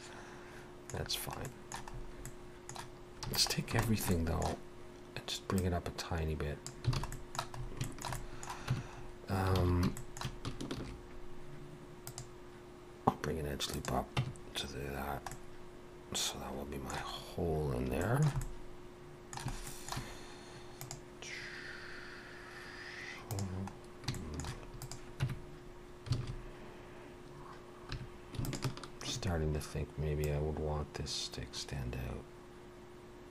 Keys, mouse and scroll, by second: 1.0-1.4 scroll down 2, 1.5 middle click, 1.9-2.8 scroll up 2, 2.2 middle click, 3.3 a, 3.5 scroll down 2, 3.8 shift+middle click, 4.1 middle click, 5.6 click, 7.0 alt+a, 7.1 middle click, 7.6 scroll up 2, 7.8 shift+middle click, 8.1 middle click, 8.7 Tab, 9.0 scroll up 2, 9.6 alt+a, 10.0 shift+middle click, 10.6 ctrl+r, 14.2 Tab, 14.4-14.9 scroll down 3, 15.3 middle click, 17.2-17.9 scroll up 2, 18.0 shift+middle click, 18.4 middle click, 19.7 shift+middle click, 23.8-24.1 scroll down 1, 24.1 shift+middle click, 24.8 click, 25.2 Tab, 26.2 alt+a, 27.9 2, 28.5 alt+shift+click, 29.4 scroll down 1, 30.2 click.